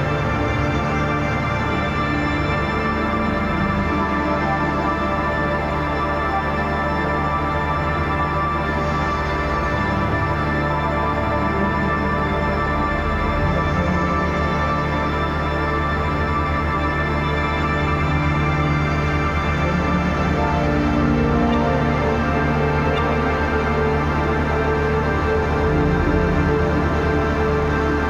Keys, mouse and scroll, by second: 1.2 click, 3.6 ctrl+y, 4.7 click, 5.0 space, 5.1 click, 5.2 space, 5.5 click, 5.9 click, 6.6 space, 6.6 click, 6.9 space, 8.0 click, 8.4 click, 9.0 shift+click, 9.9 space, 10.0 click, 10.2 space, 10.6-12.0 drag, 12.6 ctrl+=, 13.3 space, 13.6 click, 13.6 space, 14.4 click, 18.1 shift+click, 18.8 shift+Left, 20.3 click, 21.6-22.2 scroll up 1, 22.2-24.5 drag, 24.5 click.